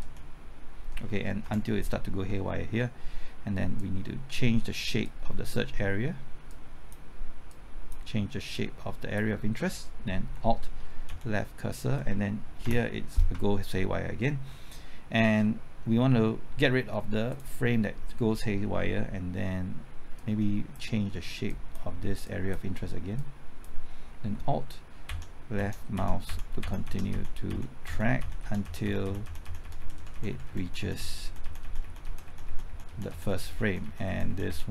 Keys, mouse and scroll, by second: 1.4 Right, 3.8-9.8 drag, 11.1 alt+Left, 12.6 Right, 14.7-17.3 scroll up 1, 17.3 click, 25.1 alt+Left, 25.6 alt+Left, 26.0 alt+Left, 26.3 alt+Left, 26.6 alt+Left, 26.9 alt+Left.